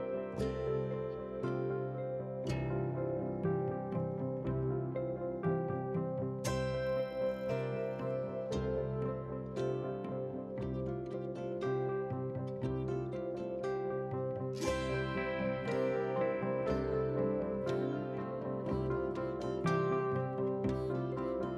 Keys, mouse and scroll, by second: 0.1 e, 1.8 alt+click, 2.2 s, 3.7 alt+click, 4.0 g, 4.7 g, 6.4 alt+shift+click, 6.8 ctrl+b, 7.4 ctrl+z, 7.6 click, 8.2 shift+click, 8.9 alt+click, 9.4 alt+shift+click, 10.0 ctrl+z, 11.0 alt+shift+click, 11.4 ctrl+b, 12.1 ctrl+z, 12.3 scroll down 1, 12.5-13.0 middle drag, 13.4 3, 13.5 click, 13.9 Delete, 14.6 middle click, 15.1-15.6 scroll up 2, 15.6 alt+click, 16.3 2, 16.7 click, 17.0 alt+click, 17.5 ctrl+b, 18.7 ctrl+z, 18.8 scroll up 4, 19.0 scroll down 1, 19.1 shift+middle click, 19.4 middle click, 20.3 middle click, 21.0-21.4 scroll down 4, 21.4 middle click.